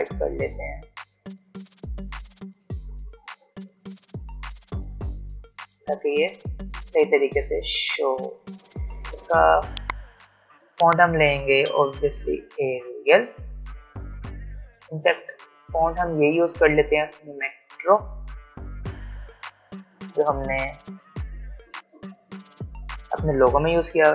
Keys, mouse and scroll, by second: 5.5-6.1 alt+scroll down 1, 7.6-10.1 drag, 10.1 click, 12.5 a, 17.3-19.6 typing, 21.7-24.1 drag.